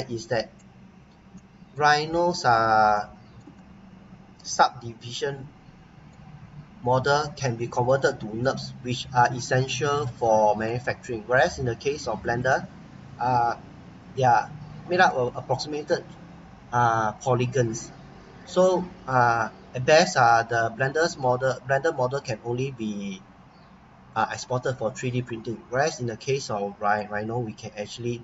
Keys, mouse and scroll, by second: 0.9 scroll up 1, 1.5 right click, 2.2 scroll down 1, 2.9 shift+right click, 3.5 right click, 6.7 scroll up 1, 7.1 scroll down 1, 7.6 right click, 8.8 scroll up 1, 10.2 right click, 10.9 scroll down 1, 12.5 click, 13.3-13.9 scroll up 1, 13.9-16.0 scroll down 1, 20.4-20.8 scroll up 1, 20.8-22.7 scroll down 1, 22.7-23.0 scroll down 1, 26.0 click, 26.9 right click.